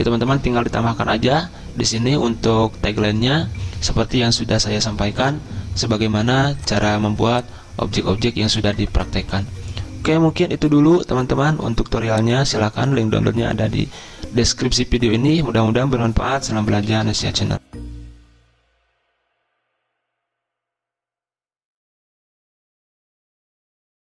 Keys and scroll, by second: 16.9 ctrl+s.